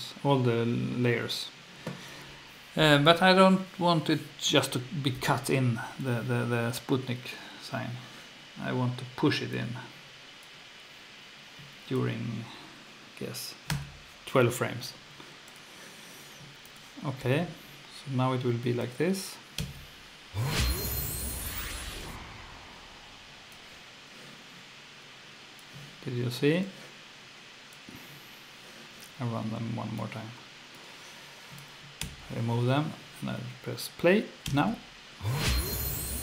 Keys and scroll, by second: 13.7 2, 17.2 F1, 19.6 F2, 32.0 F1, 34.4 F2.